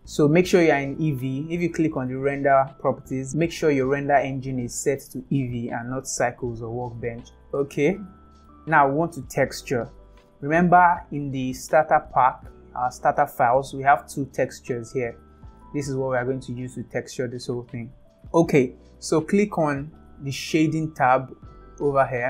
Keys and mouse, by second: 2.6 click, 3.3-5.4 drag, 8.4 middle click.